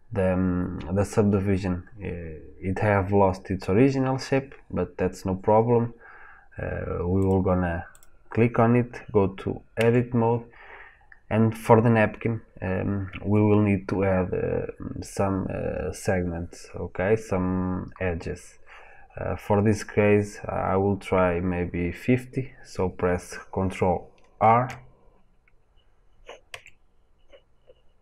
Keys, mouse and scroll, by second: 9.7 Tab, 24.4 shift+r, 26.4 Tab.